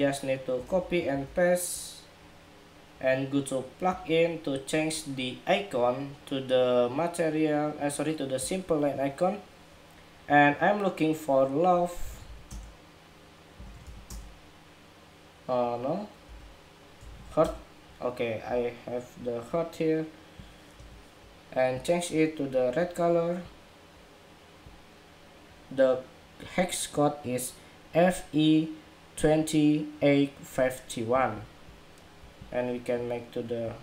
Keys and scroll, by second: 0.4 super+c, 0.8 super+v.